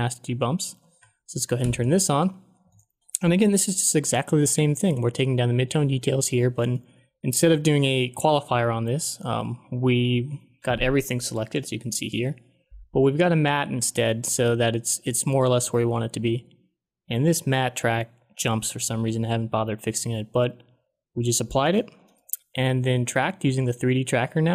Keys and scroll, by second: 1.5 ctrl+d.